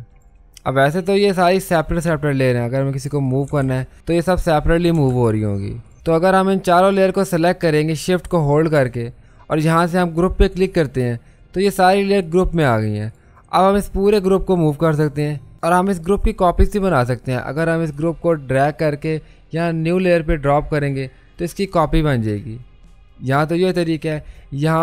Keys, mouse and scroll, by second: 3.6 ctrl+z, 3.9 click, 5.1 ctrl+z, 5.8 click, 5.9 ctrl+z, 6.8 shift+click, 10.6-15.5 drag, 17.9 click.